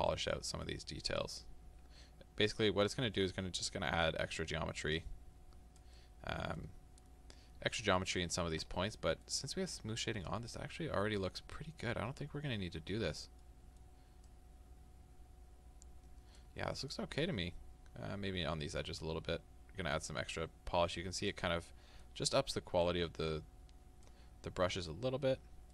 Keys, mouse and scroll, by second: 0.4 middle click, 1.2-6.0 drag, 6.0-10.1 middle drag, 7.0-7.3 scroll down 2, 7.3-7.9 scroll up 2, 7.9 scroll up 1, 10.1-13.5 drag, 13.5 middle click, 14.3-21.5 drag, 21.5-22.9 middle drag, 22.9-24.5 drag, 24.5-25.7 middle drag, 25.3-25.7 scroll down 2.